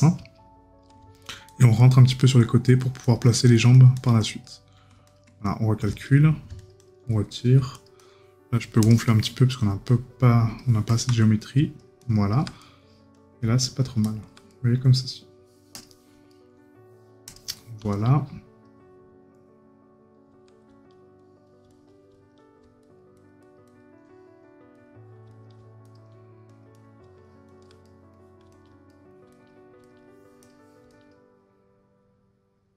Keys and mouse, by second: 1.8 right click, 5.5 right click, 7.1 right click, 11.4 right click, 14.5 right click, 16.3 right click, 27.8 right click.